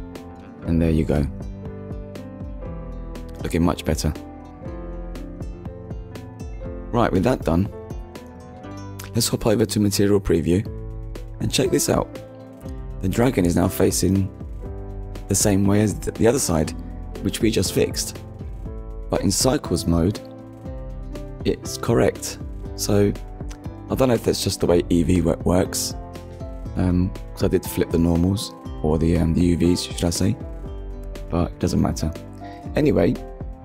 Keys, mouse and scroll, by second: 0.8 click, 1.8 click, 2.2 middle click, 3.8-4.2 scroll down 2, 4.9 middle click, 5.7 shift+middle click, 7.8 click, 10.3 click, 13.8 click, 14.8 middle click, 18.7 click, 20.7 middle click, 24.3 middle click, 25.2 ctrl+s, 26.2 middle click, 28.8 click, 29.4 click, 31.1 click, 32.6 click.